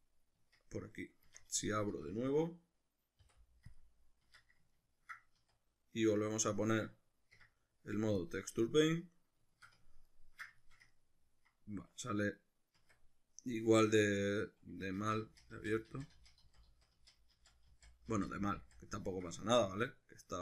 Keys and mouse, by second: 0.4 Tab, 0.7-1.2 middle drag, 1.2 Tab, 1.6 a, 3.3 u, 4.3 Tab, 4.7-15.0 ctrl+middle drag, 5.4 z, 6.7 Escape, 7.3 Tab, 12.8 Tab, 15.0 ctrl+z, 20.3 Tab.